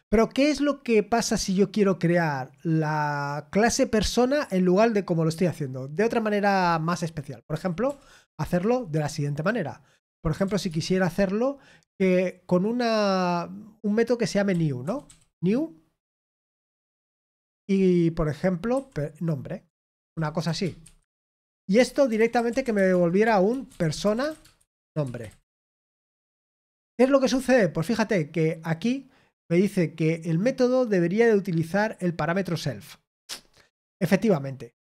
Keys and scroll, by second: 20.8-26.0 typing, 21.7 Return.